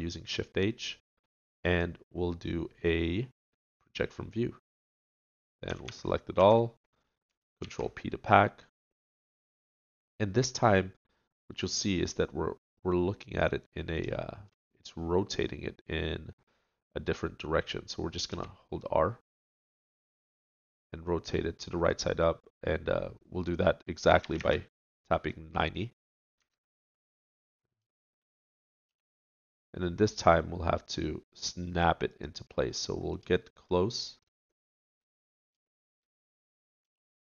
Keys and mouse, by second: 2.2-3.5 drag, 3.5 right click, 5.7 a, 5.9 a, 6.4 a, 7.6 ctrl+p, 18.3 r, 28.9 g, 29.0 click, 32.8-33.9 drag, 36.8 g.